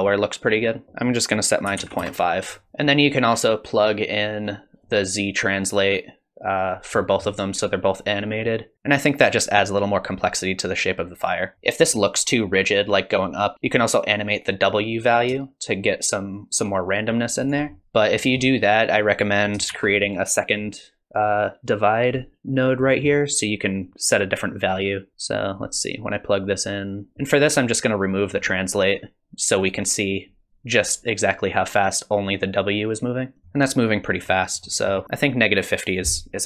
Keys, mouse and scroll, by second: 1.0 click, 2.7 middle click, 2.7-4.0 scroll down 6, 4.0 click, 5.6 click, 7.0 middle click, 11.5 middle click, 11.5-12.4 scroll up 3, 11.5 space, 13.5 middle click, 13.5-14.6 scroll down 2, 14.6 click, 17.7 middle click, 18.2 middle click, 19.1 click, 19.7 shift+d, 21.2 click, 22.9 middle click, 25.1 click, 26.5 click, 28.1 click, 33.2 click, 33.4 space, 34.3-35.0 scroll up 3, 34.6 middle click, 35.0 BackSpace.